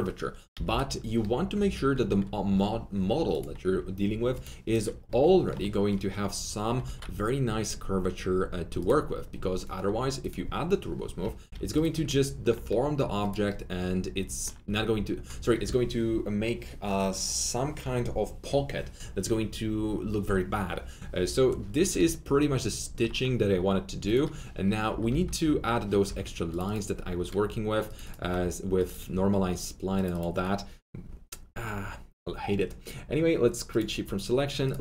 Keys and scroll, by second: 0.5 F3, 0.7 F4, 6.8 alt+1, 11.3 F3, 11.5 F4, 24.8 F3, 25.0-26.0 typing.